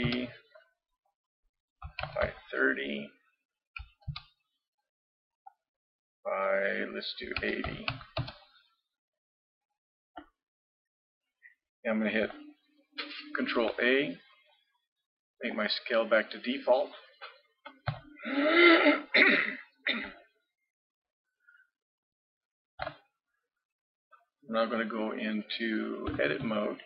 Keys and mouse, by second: 1.1-3.0 drag, 5.5-8.2 drag, 9.6-11.0 middle drag, 11.0-13.6 drag, 13.6 ctrl+a, 17.9 ctrl+KP_3, 20.2 click, 22.8 n, 26.2 Tab.